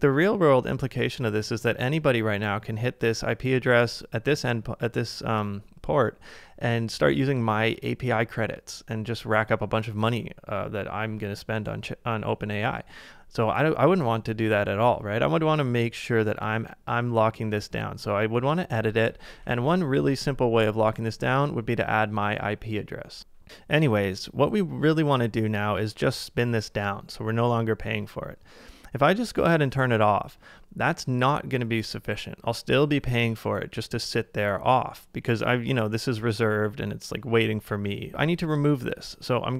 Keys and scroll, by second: 19.4 super+BackSpace, 19.7 super+BackSpace.